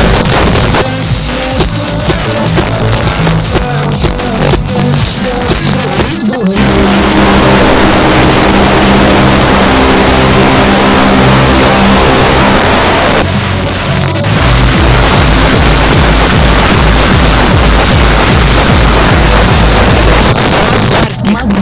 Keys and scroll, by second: 0.2 Page_Down, 12.6 Page_Down, 20.3 Page_Down.